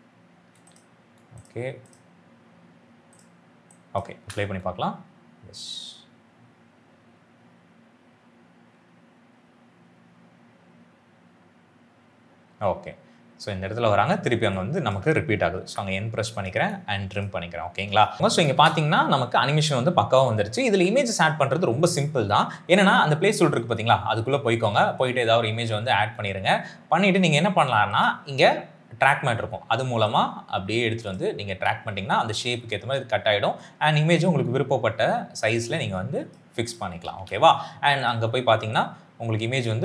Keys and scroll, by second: 0.5 space, 4.1 space, 13.4 space, 15.5 n, 18.5 space, 32.7 s, 36.9 s.